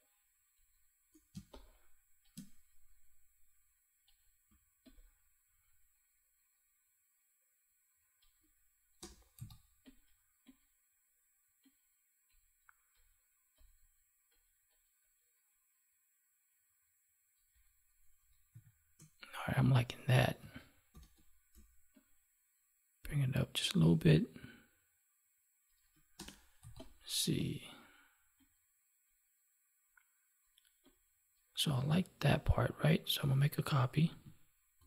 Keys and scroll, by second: 1.2 space, 20.8 ctrl+t, 34.7 ctrl+j.